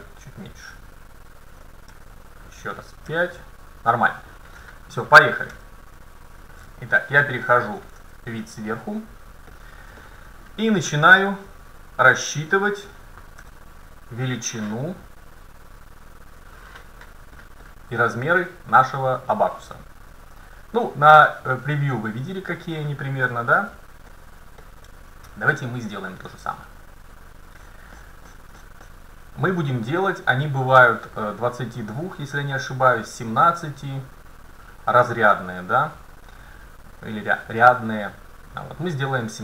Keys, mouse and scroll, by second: 3.0 KP_5, 3.0-4.9 middle drag, 3.1 KP_5, 5.1 middle click, 5.6 KP_5, 11.4 scroll down 2, 11.6-12.0 scroll up 2, 13.5 t, 17.4-17.7 scroll up 1, 17.7-19.3 middle drag, 19.3-19.9 scroll down 1, 24.1-24.7 scroll up 1, 24.7-26.6 middle drag, 27.6-30.9 middle drag.